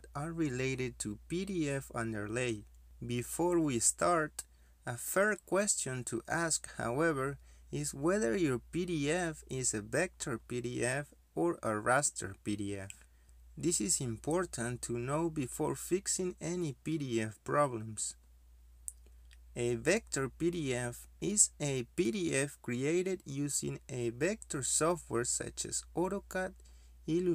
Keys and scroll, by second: 10.0 z, 10.1 space.